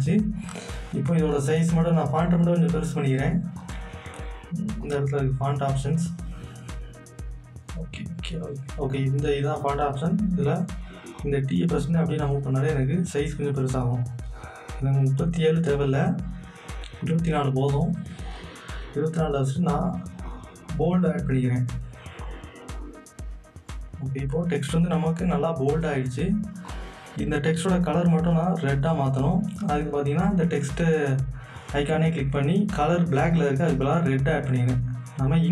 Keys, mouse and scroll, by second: 3.6 click, 4.8 click, 7.9 click, 11.2-14.6 drag, 14.9 click, 19.7 click, 19.7 click, 23.7 click, 26.7 click, 26.7-30.5 drag, 33.4 click.